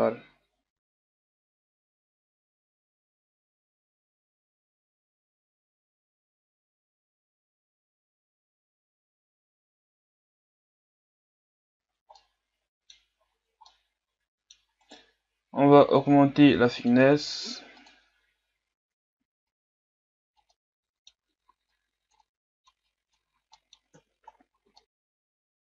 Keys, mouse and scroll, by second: 1.2 middle click, 1.5-11.3 typing, 1.6 scroll up 3, 1.9 ctrl+Tab, 2.0 right click, 3.0 right click, 3.6 scroll down 3, 3.8 click, 4.1 middle click, 4.3 click, 4.6 scroll up 1, 4.8 click, 5.0-5.3 scroll down 4, 5.3 right click, 5.9 click, 6.6-7.4 scroll down 8, 6.7 middle click, 6.8 click, 7.1 middle click, 7.4 scroll up 3, 7.5 scroll down 1, 7.6 scroll up 1, 7.6 click, 8.6 Tab, 8.7 scroll down 3, 8.9-9.3 scroll up 5, 9.4 Tab, 10.6 right click, 11.4 scroll down 3, 11.6-12.2 scroll up 1, 12.2 middle click, 13.1-13.7 scroll up 6, 13.7-14.8 middle drag, 14.8-16.7 right drag, 17.9-20.5 drag, 20.5 middle click, 21.1 Tab, 21.4 a, 21.7 click, 22.1 middle click, 22.8 click, 23.2 Tab, 23.3 a, 23.4 scroll down 4, 23.5 middle click, 23.9 KP_1, 24.2 scroll down 3, 24.5 scroll up 1, 24.7 middle click, 25.2 Tab, 25.6 Tab.